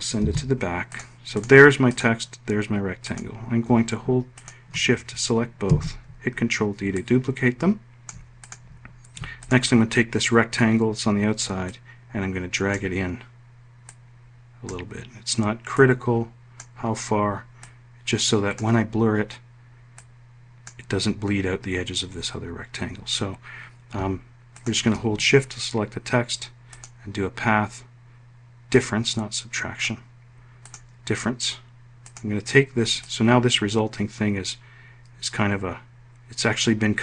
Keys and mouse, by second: 5.4 ctrl+d, 6.7 ctrl+click, 28.4-29.6 drag, 30.3 click, 31.7 click, 32.7-37.0 ctrl+drag.